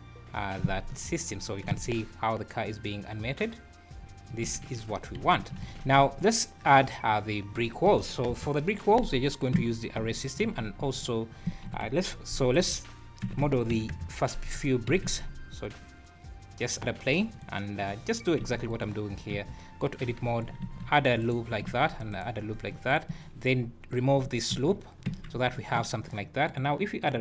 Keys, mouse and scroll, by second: 0.9 Escape, 1.3 `, 1.7 space, 4.3 Escape, 5.6 alt+a, 5.9 `, 8.1 scroll down 4, 8.2 KP_1, 8.9-9.4 scroll up 5, 10.2 shift+right click, 10.4 shift+a, 11.6 r, 13.2 r, 14.8 s, 17.3 click, 18.4 x, 19.2 scroll up 2, 19.3 Tab, 20.1 z, 20.6 ctrl+r, 21.7 ctrl+r, 22.5 scroll up 3, 22.9 click, 24.6 ctrl+x, 25.1 Tab, 26.5 click.